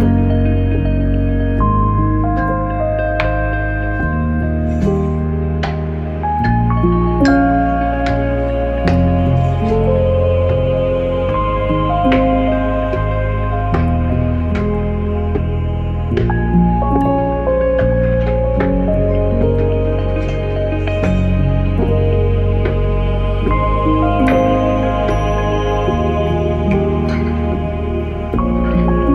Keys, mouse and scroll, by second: 0.0-1.5 typing, 3.5 click, 20.3 click, 22.0 click, 24.4 click, 27.2 click.